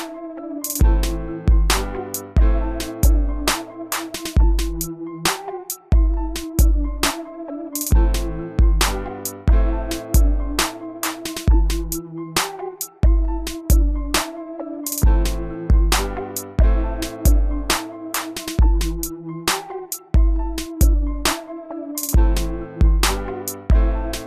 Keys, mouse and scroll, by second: 5.3-7.9 alt+drag, 8.6 shift+click, 9.9 shift+click, 11.6-14.0 ctrl+drag, 16.6-17.1 scroll up 1, 17.1-18.2 scroll down 1, 18.2 click.